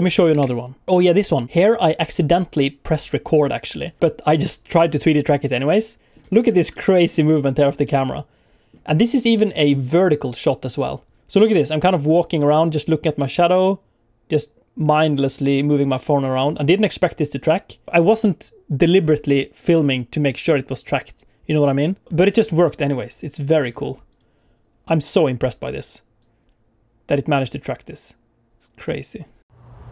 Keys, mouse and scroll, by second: 0.1 ctrl+n, 5.7 middle click, 6.3 scroll up 2, 6.5 shift+middle click, 6.7 middle click, 7.8 middle click, 9.7 click, 10.3-10.7 scroll up 1, 10.7 scroll down 1, 11.5 middle click, 23.4-23.9 scroll up 1, 23.9 click, 23.9 scroll down 3, 24.1 click, 25.2 click, 26.2 click.